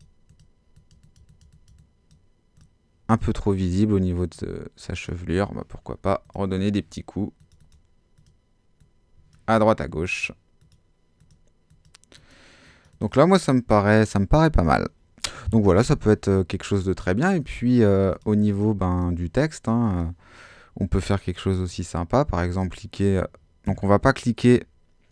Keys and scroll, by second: 23.7 Escape.